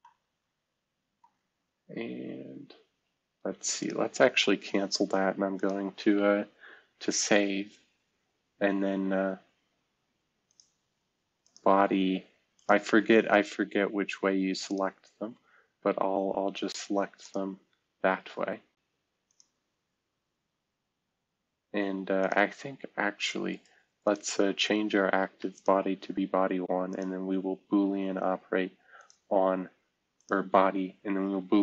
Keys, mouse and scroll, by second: 5.0 scroll down 2, 7.0 ctrl+s, 14.6 ctrl+click, 17.2-18.8 drag, 19.3-20.8 drag, 30.1 click.